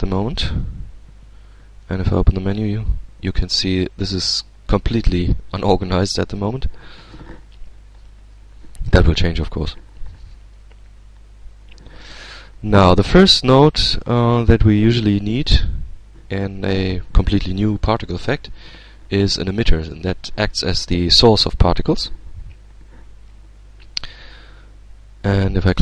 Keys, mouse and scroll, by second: 0.4-0.8 scroll up 1, 1.7 shift+a, 25.0 click.